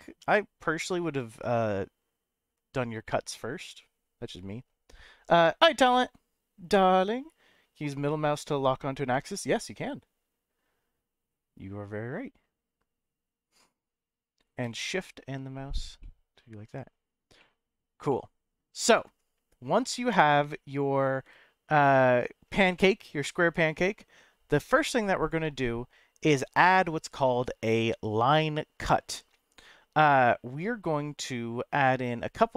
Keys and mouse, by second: 9.1-13.5 middle drag, 14.8-15.9 shift+middle drag, 16.0-17.2 middle drag, 17.4 middle click, 18.1 middle click, 21.8 shift+middle click, 22.7-23.7 middle drag, 25.2 click, 30.6-32.2 middle drag.